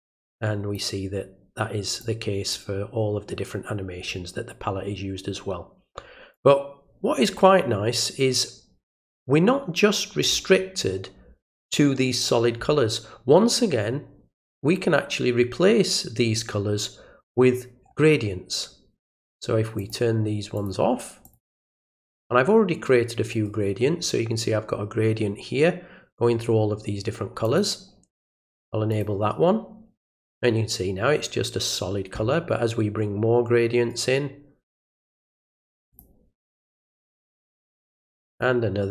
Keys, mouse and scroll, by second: 0.3 click, 2.0 click, 6.3-10.2 drag, 19.7 click, 20.5 click, 21.2 click, 21.7 click, 23.3 right click, 27.4 click, 28.9 click, 33.9 right click, 35.9 click, 36.9 click, 38.3 click.